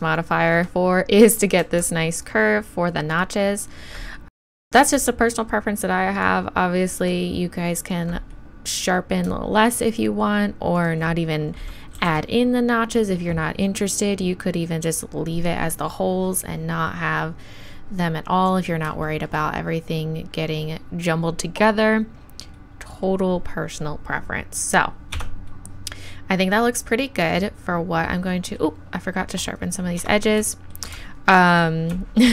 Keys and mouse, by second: 2.2-12.0 right drag, 12.0 shift+e, 15.3-16.9 drag, 17.5 middle click, 22.7-25.2 middle drag, 25.2 Tab, 29.5-30.0 middle drag, 30.0 Tab, 30.5 click.